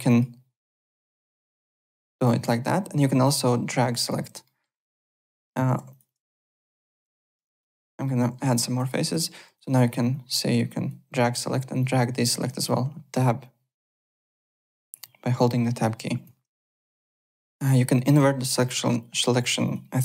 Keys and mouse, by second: 0.0 Tab, 0.0 click, 0.7 Tab, 0.7 click, 1.2 click, 1.7 click, 2.1 click, 2.8 Tab, 3.2 click, 4.0 Tab, 4.4 middle click, 4.5-9.3 typing, 5.1 click, 5.9 click, 8.0 middle click, 8.8 middle click, 9.5 click, 9.7 Tab, 10.1 click, 10.8 Tab, 11.8 click, 12.4 Tab, 13.4 click, 14.4 Tab, 15.0 Tab, 15.3 click, 15.9 Tab, 16.7 alt+Tab, 17.2 click, 18.0 alt+Tab, 19.6 click.